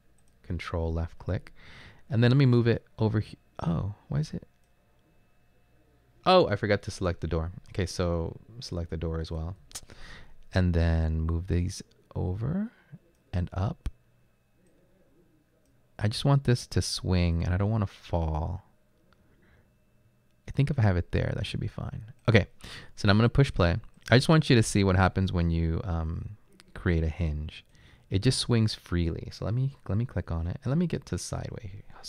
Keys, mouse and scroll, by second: 29.9 Left, 31.0 Left, 31.1-32.0 typing.